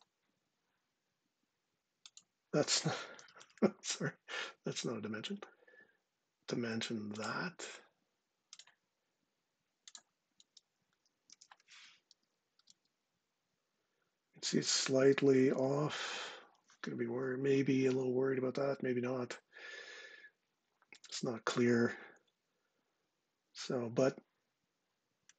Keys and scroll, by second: 2.8 typing, 10.9 super+v, 12.2 Return.